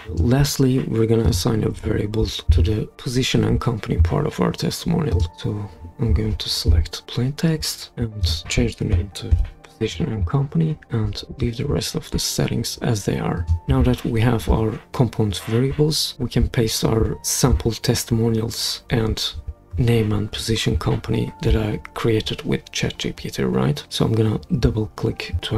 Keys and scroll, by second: 9.3 super+v.